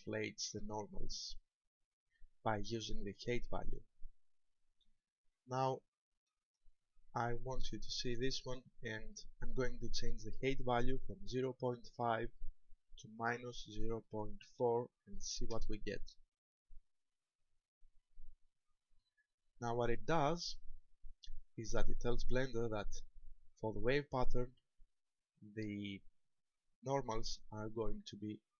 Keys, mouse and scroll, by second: 1.2 middle click, 5.6 shift+middle click, 6.5 shift+middle click, 7.4 shift+middle click, 8.2-8.9 scroll up 2, 11.6 click.